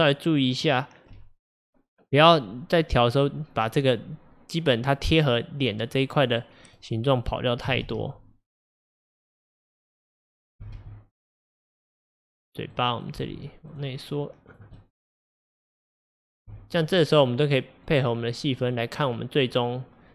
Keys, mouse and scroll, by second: 6.7 click, 7.7 g, 10.4 click, 10.7 g, 12.8 click, 13.2 g, 14.2 click, 14.8-16.1 middle drag, 16.1 click, 16.5 g, 17.9 click, 18.6 click, 19.0 scroll down 3.